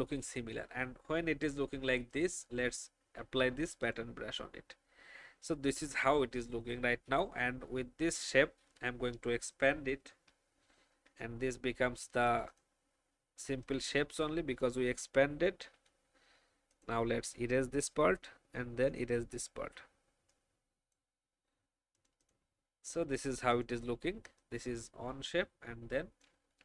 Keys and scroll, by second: 10.1 ctrl+2, 15.7 Delete.